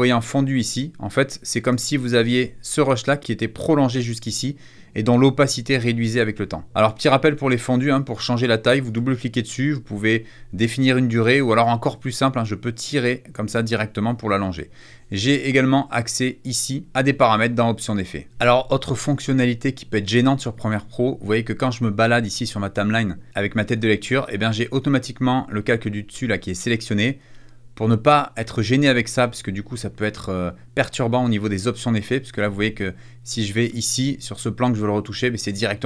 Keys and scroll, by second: 6.4 -, 6.7 =, 13.9 -.